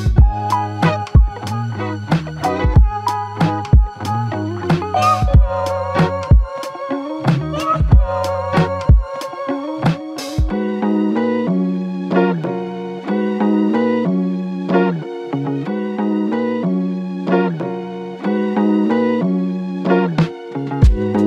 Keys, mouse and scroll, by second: 2.1 ctrl+click, 3.6 ctrl+click, 5.4 alt+click, 6.6 double click, 9.3 shift+click, 16.3 shift+click, 17.5 ctrl+click, 18.4 ctrl+click.